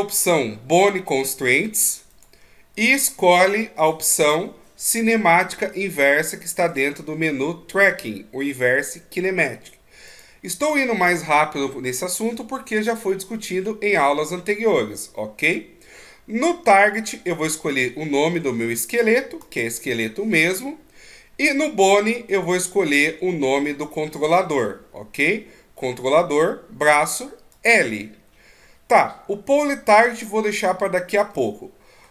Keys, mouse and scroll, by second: 2.4 click, 17.3 click, 22.7 click, 31.7 middle click.